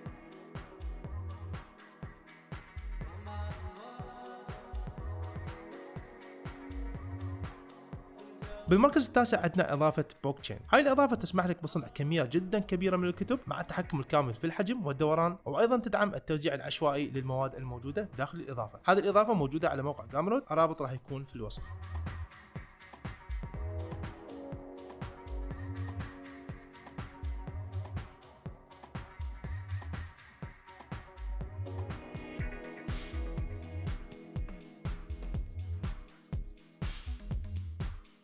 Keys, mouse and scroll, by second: 1.8 middle drag, 2.1 shift+middle click, 2.3 middle drag, 2.6 g.